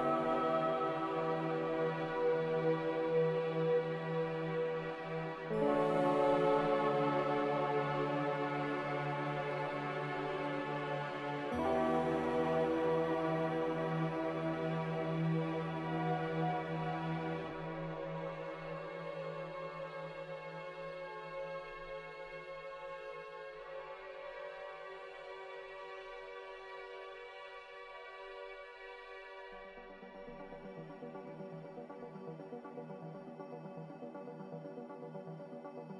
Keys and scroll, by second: 0.6 typing, 1.2 Return, 6.0 g, 8.2 z, 20.2 a, 28.4 typing, 30.0 1, 32.3 1.